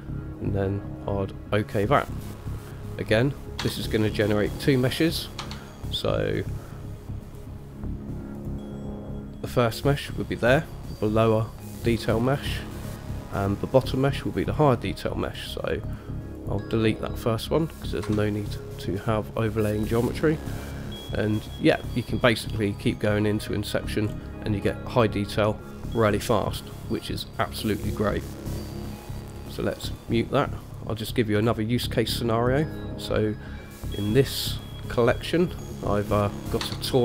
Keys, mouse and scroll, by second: 3.8 Tab, 5.6 Tab, 7.5 click, 8.6 click, 9.9 click, 12.4 click, 14.2 click, 15.5 click, 16.1 click, 16.5 click, 18.3 Delete, 20.3 click, 20.8-22.3 middle drag, 22.6-23.4 middle drag, 24.3-24.8 scroll up 2, 24.8-25.7 scroll down 1, 25.7 middle drag, 25.7 scroll down 1, 28.5 click, 30.1 click, 30.8 click, 31.6-32.8 scroll down 1, 32.8-34.7 scroll down 1, 34.7 click, 35.3 click, 36.2 click, 36.8 Tab.